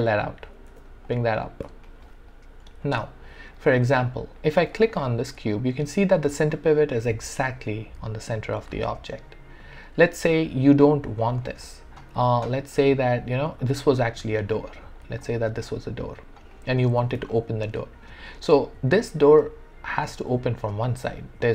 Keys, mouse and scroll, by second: 0.7 w, 1.1 click, 1.9 alt+right click, 2.9 alt+click, 3.8 alt+click, 5.6-11.6 drag, 12.1 r, 13.6-15.2 drag, 15.2-16.5 alt+drag, 16.5 alt+right click, 16.9 e, 17.3-20.2 alt+drag, 20.2-21.5 drag.